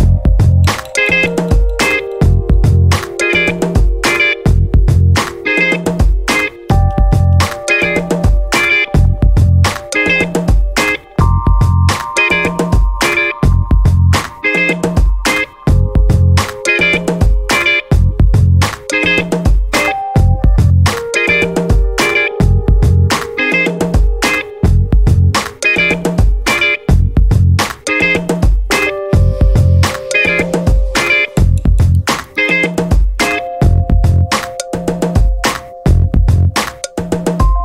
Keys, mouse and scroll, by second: 1.5 click, 2.5-2.9 scroll down 2, 3.3 scroll up 2, 3.9 scroll down 2, 5.3 click, 5.8 right click, 7.5 click, 8.5 click, 10.5 click, 11.5 click, 11.9 click, 13.0 click, 13.6 scroll up 2, 14.1 scroll down 2, 14.9-15.6 scroll up 4, 17.5 click, 18.8 click, 22.4 click, 24.3 click, 26.3-27.6 drag, 28.3 click, 29.3 click, 31.5 click, 32.4 click, 33.5-33.8 scroll down 1, 34.3 click, 35.7 click.